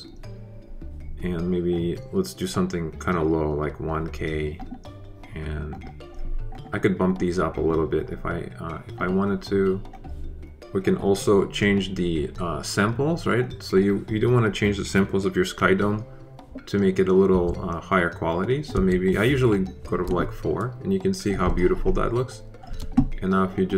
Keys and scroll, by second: 17.2 4, 18.7 4.